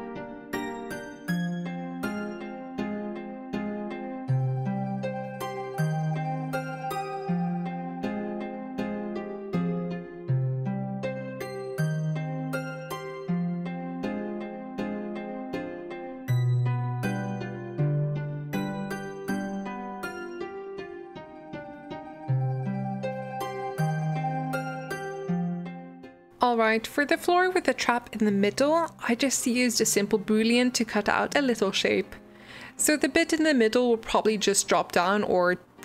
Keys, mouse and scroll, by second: 0.0 middle click, 0.4 ctrl+KP_Add, 0.6 g, 1.4 click, 1.5 alt+z, 1.6 g, 1.9 s, 2.4 alt+z, 2.5 middle click, 2.7 click, 3.0 g, 3.2 shift+click, 3.4 g, 4.3 alt+z, 4.4 g, 5.0 click, 5.2 s, 6.1 click, 6.2 ctrl+b, 8.2 Tab, 8.2 middle click, 8.4 scroll down 1, 8.6-9.0 shift+middle drag, 9.0 click, 9.2 shift+d, 9.6 shift+middle click, 9.9 Tab, 10.3 click, 10.4 click, 10.6 alt+z, 10.7 alt+z, 13.4 middle click, 13.6-25.1 typing, 20.6 alt+z, 25.4 Tab, 25.5 scroll down 2, 25.6 middle click, 25.8 middle click, 26.3 shift+right click, 26.9 shift+a, 27.4-28.4 drag, 28.4 middle click, 28.8 right click, 29.3-30.9 drag, 31.1 shift+click, 31.4 ctrl+KP_Subtract, 31.7 click, 31.8 s, 32.5 click, 32.7 shift+middle click, 32.9 g, 33.4 Escape, 33.6 middle click, 33.8 Tab, 33.9 middle click, 34.3 alt+z, 34.6 click, 35.5 Tab, 35.5 middle click, 35.7 alt+z.